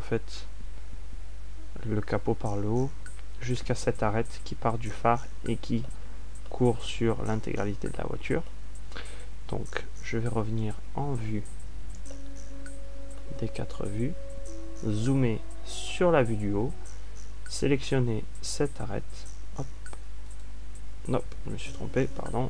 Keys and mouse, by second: 0.0 a, 2.8 a, 12.2 ctrl+alt+q, 15.7 ctrl+alt+q.